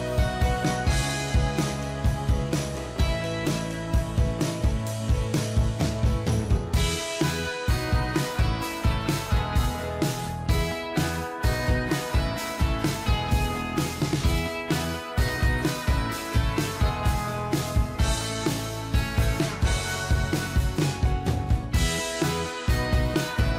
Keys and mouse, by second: 1.5 ctrl+click, 3.9 double click, 9.9 ctrl+click, 14.9 ctrl+j, 15.7 ctrl+click, 20.3 Up.